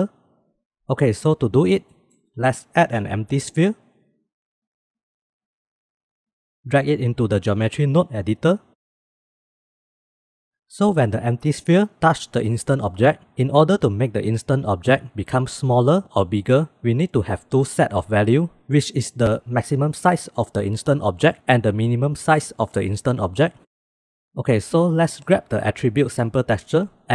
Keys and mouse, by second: 1.8 shift+a, 5.1 g, 7.2-8.3 drag, 8.8 middle drag, 9.4 click, 25.3-26.2 drag.